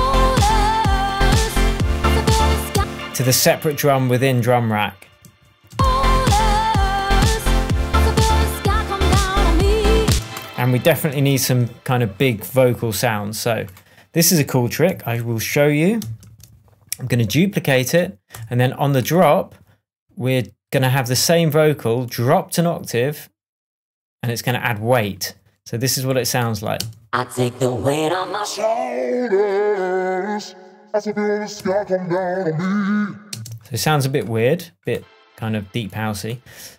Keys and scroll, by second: 2.7 space, 5.2 shift+Tab, 5.6 shift+space, 6.2 shift+Tab, 10.0 space, 10.7 super+space, 11.0 super+s, 11.3 shift+super+Tab, 12.1 shift+Tab, 12.6 shift+Tab, 16.2 super+d, 18.3 BackSpace, 26.7 space, 31.5 shift+Tab, 33.3 space.